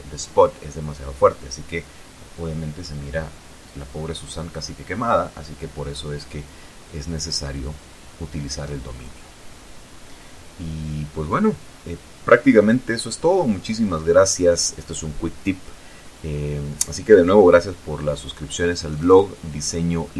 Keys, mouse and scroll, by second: 2.8 Escape, 3.7 ctrl+z, 5.4 F12.